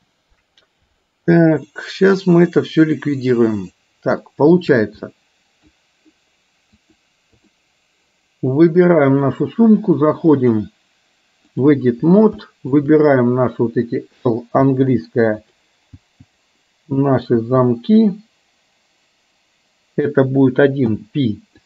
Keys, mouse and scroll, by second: 1.1 ctrl+z, 1.7-3.5 middle drag, 4.2 shift+middle click, 5.1 middle click, 6.9 click, 10.5-11.9 drag, 12.6 shift+middle click, 14.6 l, 15.5 click, 16.0 l, 18.9 l, 21.2 p.